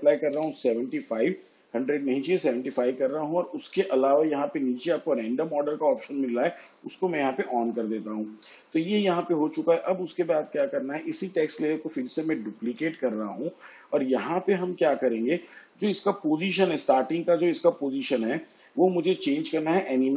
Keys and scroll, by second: 0.3 5, 12.6 ctrl+d.